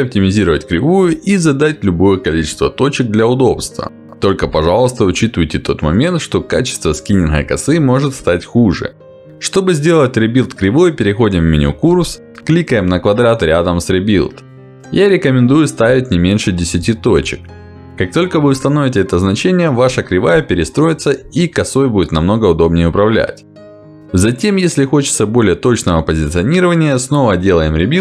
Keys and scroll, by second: 10.3 Escape, 15.4 1, 16.5 0, 20.7 F9, 24.7 w, 27.0 ctrl+z.